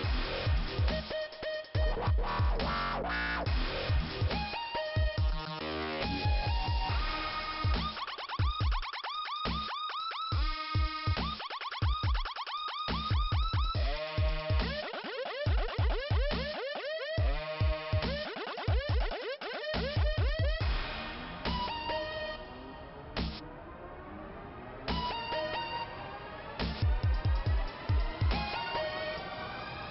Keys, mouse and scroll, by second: 0.4 click, 1.1 click, 2.0 scroll down 2, 2.7 right click, 7.7 alt+i, 8.7 scroll up 1, 9.8 click, 11.2 click, 12.8 click, 15.5 click, 16.7 click, 18.7 click, 19.3 click, 20.1 click, 22.2 click, 27.3 click, 28.1 scroll down 1, 28.5 click, 29.3 p.